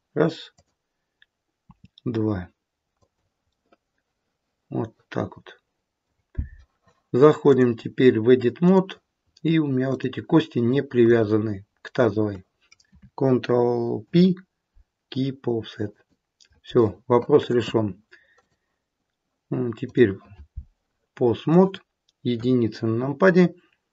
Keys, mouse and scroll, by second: 0.5 click, 1.5 r, 3.5 middle click, 5.0 middle click, 7.4 click, 9.2-9.5 scroll up 2, 9.7 click, 10.9 shift+click, 11.9 click, 14.0 ctrl+p, 18.2 click, 22.2 KP_1, 22.7-23.7 scroll down 2.